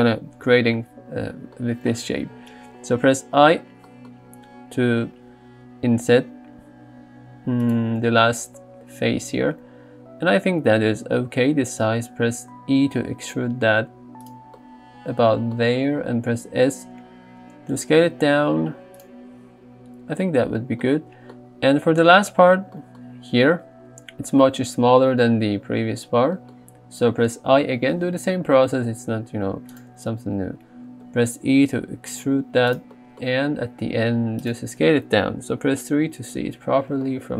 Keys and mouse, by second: 0.5 KP_3, 4.2 i, 12.4 e, 14.3 click, 16.3 s, 19.0 click, 27.7 i, 31.1 e, 32.7 click, 33.5 s, 34.4 click, 35.6 KP_3.